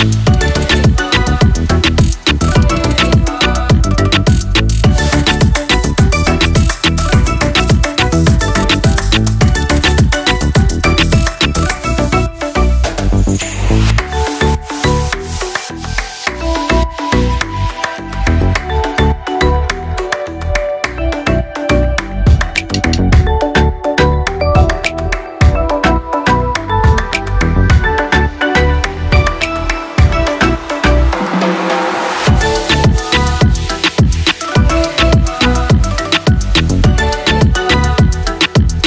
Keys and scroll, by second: 35.5 ctrl+c, 35.7 ctrl+v.